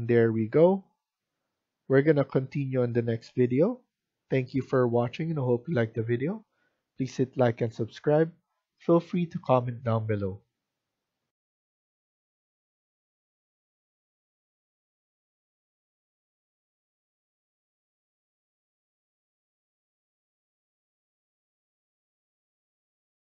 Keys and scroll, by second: 8.2 Escape.